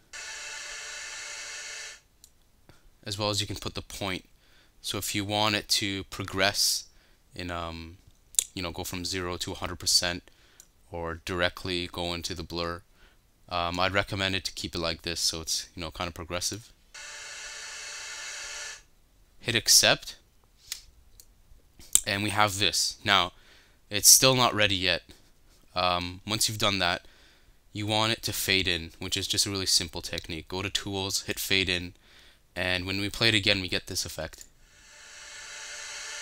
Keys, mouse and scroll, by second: 16.6 right click, 21.3 right click.